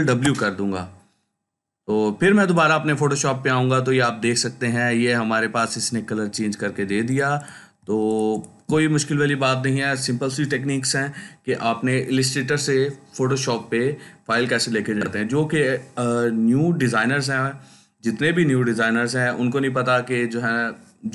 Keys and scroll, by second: 6.7 ctrl+space, 7.2 ctrl+space.